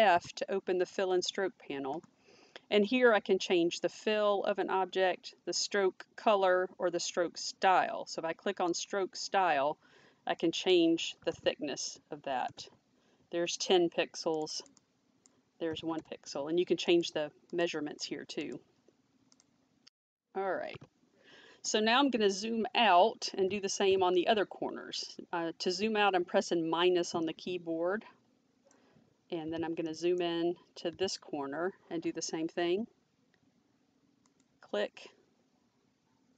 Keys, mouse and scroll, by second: 8.7 ctrl+shift+f, 10.4 click, 11.1 1, 11.2 0, 12.4 Return, 14.3 click, 14.5 click, 15.6 7, 15.9 Return, 16.9 click, 18.4 click, 20.7 ctrl+z, 27.3 middle click, 29.9 middle click, 30.8 ≡, 34.3 click.